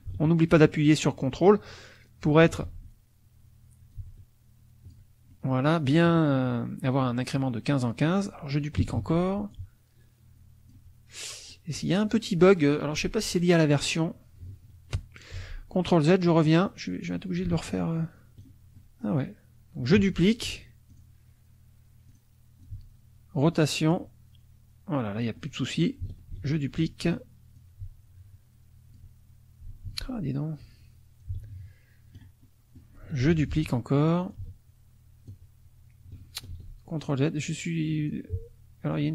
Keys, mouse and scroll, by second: 2.6 ctrl+z, 3.9-5.1 ctrl+drag, 5.3-8.9 ctrl+middle drag, 8.9 ctrl+d, 9.5-10.9 ctrl+drag, 11.5 middle click, 15.3 ctrl+z, 16.3 middle click, 17.3-18.6 ctrl+drag, 18.8 ctrl+middle click, 19.9 ctrl+d, 20.9 click, 22.1 click, 22.6-24.1 ctrl+drag, 25.0 click, 26.3 ctrl+d, 27.5-29.1 ctrl+drag, 29.9 ctrl+z, 31.2-32.3 ctrl+drag, 32.4 ctrl+middle click, 33.3 ctrl+d, 34.3-35.4 ctrl+drag, 36.5 ctrl+z, 38.1-39.1 ctrl+drag.